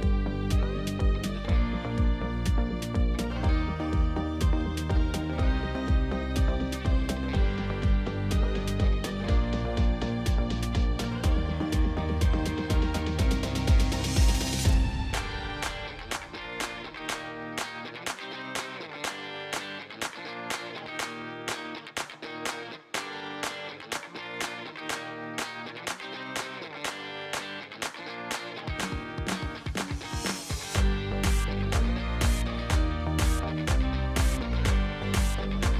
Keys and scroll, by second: 1.4 ., 1.6 2, 2.5 Return, 4.6 alt+a, 7.8 3, 14.1 g, 14.5 z, 17.8 shift+a, 19.6 Tab, 23.0 shift+z, 25.2 g, 25.4 y, 33.0 e, 35.3 Tab.